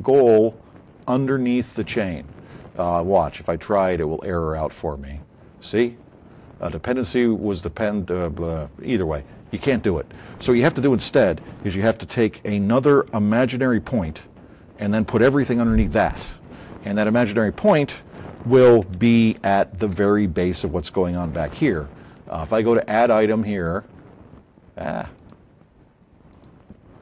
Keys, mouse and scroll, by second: 0.8 click, 3.1-4.1 drag, 4.6-5.9 drag, 19.2-20.0 shift+drag, 20.1 click, 23.5-24.4 drag, 25.1 click.